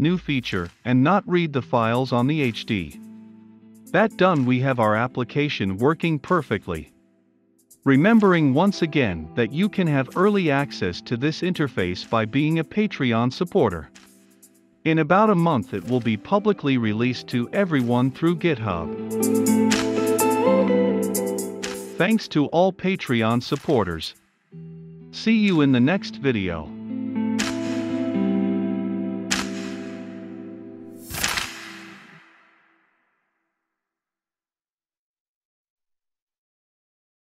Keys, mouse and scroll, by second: 9.3-12.3 drag, 12.6 super+m, 14.2 click, 14.6-20.9 drag.